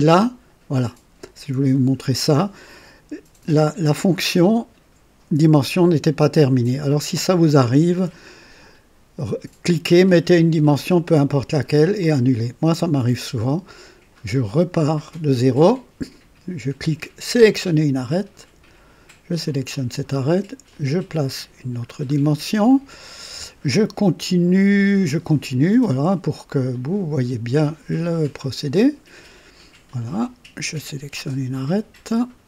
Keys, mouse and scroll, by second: 9.6 click, 11.9 click, 14.3 click, 17.3 click, 19.4 click, 20.7 click, 21.8-22.2 scroll down 2, 22.6 right click, 28.0 click, 29.9 click, 32.1 click.